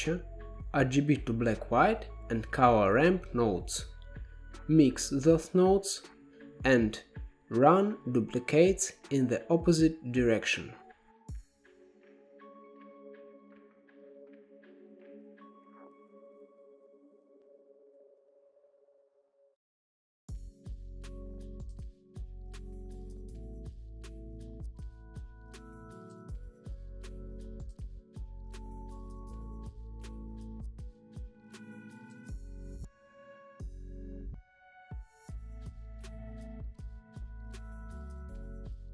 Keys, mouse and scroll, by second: 0.0 middle click, 0.8-1.8 scroll down 10, 1.8-4.7 scroll down 3, 4.7-6.1 drag, 6.1 g, 7.6-9.4 drag, 9.4-11.0 middle drag, 11.0 shift+d, 13.1-13.4 middle drag, 13.4 scroll up 2, 14.0-15.4 drag, 15.4-16.0 middle drag, 16.0 click, 16.4 g, 17.3-17.7 middle drag, 17.7 scroll up 5, 18.2 shift+a, 20.9-21.6 middle drag, 21.6 shift+a, 24.4-29.5 drag, 30.1 drag, 30.3 middle click, 31.0 shift+d, 32.3-33.0 middle drag, 33.0-34.4 drag, 34.7 g, 35.5 shift+a, 37.1-38.9 drag.